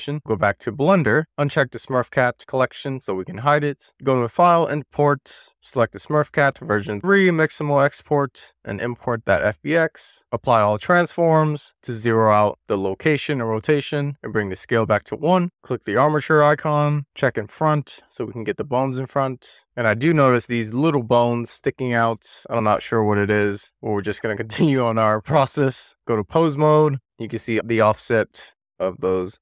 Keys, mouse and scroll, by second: 1.2 super+s, 1.9 click, 4.2-5.4 drag, 10.1 shift+middle click, 11.3 ctrl+a, 15.6 click, 17.1 click, 18.3 drag, 19.2 click, 25.9 click.